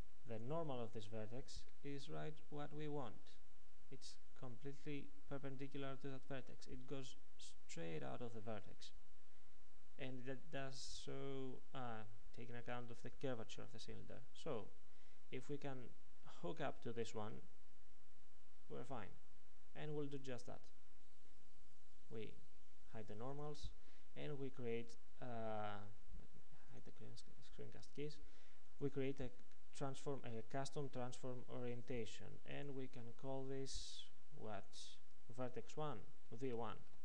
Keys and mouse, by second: 0.7-2.4 drag, 23.3-34.3 drag, 36.2 click.